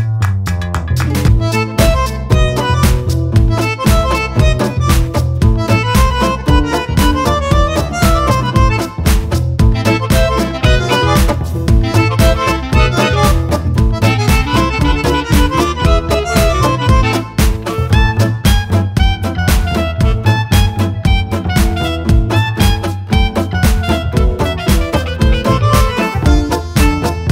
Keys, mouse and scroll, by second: 0.4 click, 1.7 ctrl+click, 2.7 KP_Subtract, 3.4 click, 4.0 ctrl+z, 7.6-11.3 drag, 12.1 KP_Add, 12.8 click, 13.8 click, 14.2 click, 16.3 shift+click, 16.8 shift+click, 17.4 shift+click, 18.2-20.1 shift+drag, 20.7 shift+click, 21.9 shift+click, 22.3-23.8 shift+drag, 24.8 shift+click, 25.2 shift+click, 26.0 shift+click, 27.1 shift+click.